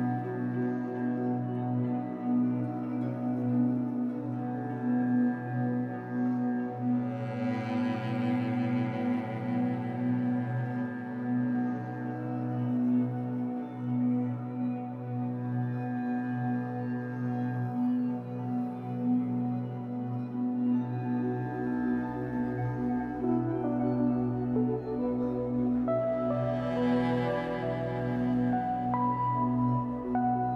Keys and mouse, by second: 0.0-0.1 typing, 0.9 click, 2.3 click, 3.0 typing, 3.4 Return, 4.7 click, 6.1 click, 6.7 click, 7.5 0, 7.8 Return, 8.5 click, 10.2 click, 10.6 click, 10.6 typing, 12.3 click, 13.2 click, 14.5 click, 16.5 click, 17.6 click, 18.2 click, 20.9 click, 25.3 alt+click, 29.4 space, 30.0-30.5 drag.